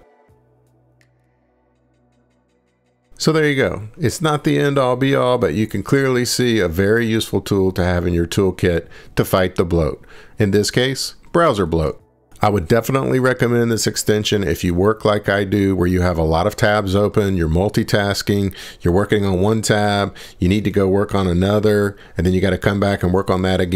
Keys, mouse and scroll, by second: 2.8 click, 3.2 click, 3.7 ctrl+shift+Escape.